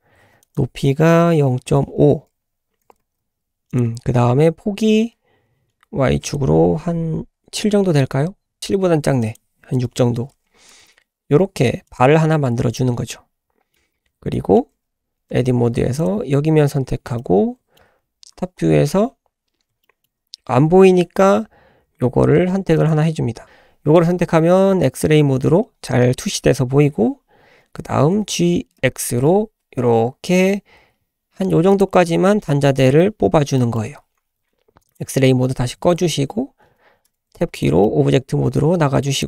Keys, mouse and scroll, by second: 0.4-2.8 drag, 0.7 s, 2.8 g, 6.2-8.6 drag, 8.6 g, 9.2 click, 10.7 g, 12.4-12.7 scroll down 2, 12.7-13.7 middle drag, 14.0-14.3 scroll down 1, 14.3 middle click, 14.7 scroll up 2, 15.3 Tab, 15.7 3, 16.0 click, 16.7-17.2 scroll down 1, 17.2-17.7 middle drag, 17.9 `, 18.5-19.1 scroll up 1, 19.8-20.1 shift+middle drag, 22.7 click, 24.6 scroll up 2, 24.9-25.2 shift+middle drag, 27.5-28.2 scroll down 2, 28.2 g, 32.3 scroll down 1, 32.5-33.0 middle drag, 33.0-33.6 scroll up 3, 33.6 middle drag, 33.7-34.8 scroll down 2, 34.8 scroll down 1, 34.9-35.7 drag, 35.7-36.1 scroll up 2, 36.2 scroll down 1, 36.3-37.1 scroll down 1, 37.1 Tab, 37.5 click, 37.9-39.0 middle drag, 39.2 click.